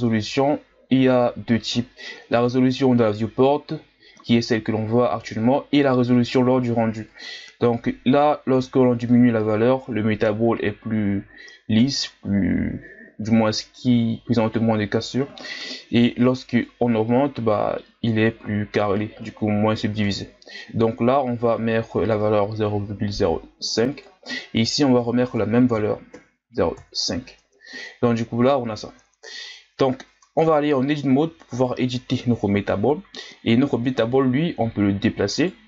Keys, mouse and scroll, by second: 16.6-29.0 drag, 29.0-30.1 scroll up 3, 30.1 Tab, 31.5-34.0 right drag, 34.0 g.